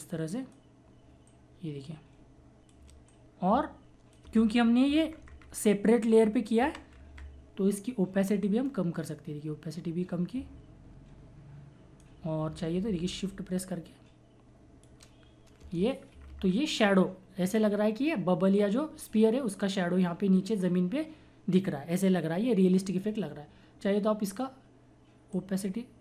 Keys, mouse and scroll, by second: 1.3-4.2 shift+drag, 4.2 Return, 4.9 Up, 6.6 Left, 6.9 Up, 8.4-13.3 drag, 13.3-15.6 shift+drag, 15.6 Return, 16.1 Up, 17.5 click, 25.3-26.0 drag.